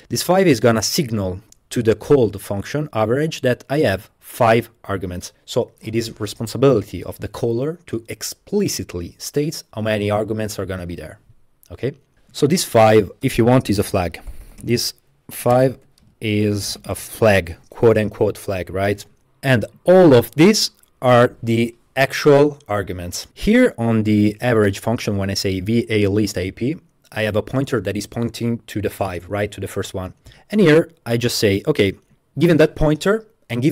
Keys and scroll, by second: 12.2 Tab, 12.4-17.9 typing, 19.3 typing.